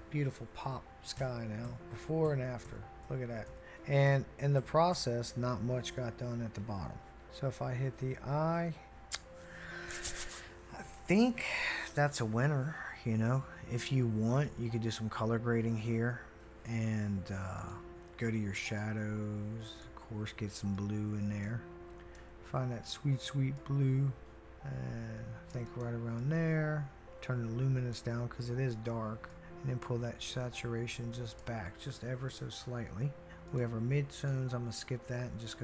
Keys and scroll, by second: 1.2-2.2 typing, 2.6 Return, 3.5 Return, 4.1-4.9 typing, 7.1-8.9 typing.